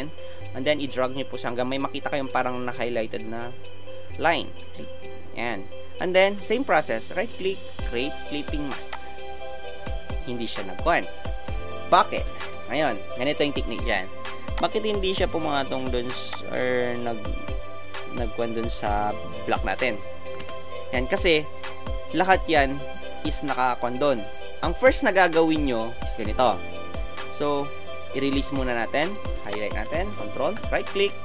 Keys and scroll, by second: 20.4 Return.